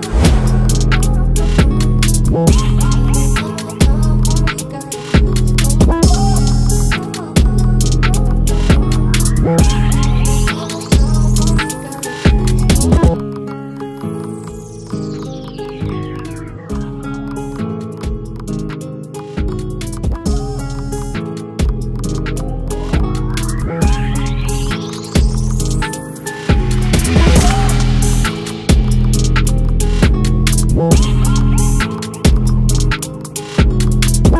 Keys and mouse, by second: 1.7 click, 4.4-5.6 drag, 5.8 click, 6.2 click, 7.2 click, 8.1 click, 10.8 click, 11.5 click, 14.4 click, 15.3 click, 15.8 click, 16.5 click, 16.9 click, 31.1 click, 31.7 click, 33.3 click.